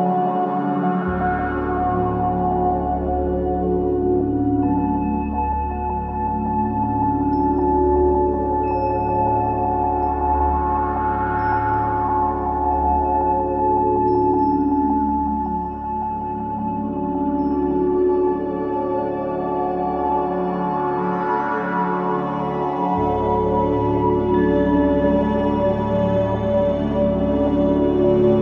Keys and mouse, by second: 0.9 s, 2.3-8.0 drag, 2.5 s, 4.6 g, 7.5 z, 9.8 z, 14.4 shift+a, 19.9-22.2 middle drag, 21.3 shift+a, 26.7 g, 28.1 click.